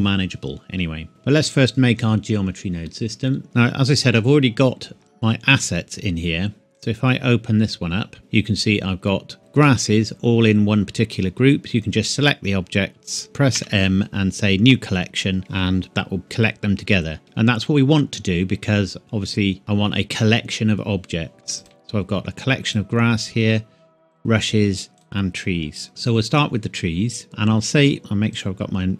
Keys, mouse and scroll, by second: 3.4-4.0 scroll up 1, 9.2 click, 9.4 click, 10.0-10.4 scroll down 1, 10.9-11.2 scroll down 1, 11.2 scroll up 1, 12.1 scroll down 1, 12.2 scroll up 1, 12.2 scroll down 1, 12.4-12.9 scroll up 1, 12.9 scroll down 1, 13.2 n, 13.6 m, 15.4 Escape, 16.7-17.2 scroll up 1, 17.2-18.5 scroll down 1, 21.6 click, 23.3-24.1 scroll up 1, 24.1 click, 27.2-28.0 scroll up 1, 28.4 click.